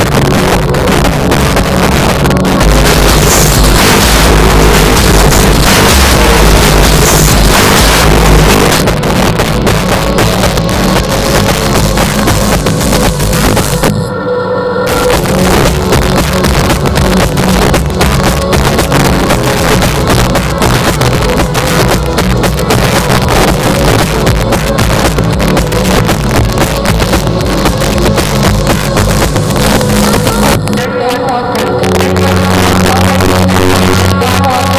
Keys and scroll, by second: 8.5 Page_Down.